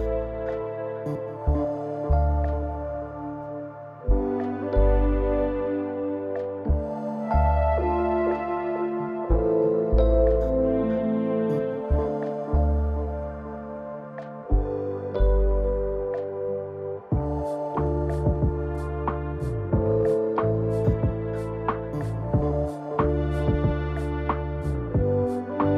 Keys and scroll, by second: 0.7 ctrl+d, 7.3 space, 11.3 ctrl+d, 17.4 0, 21.6 0, 23.8 ctrl+d.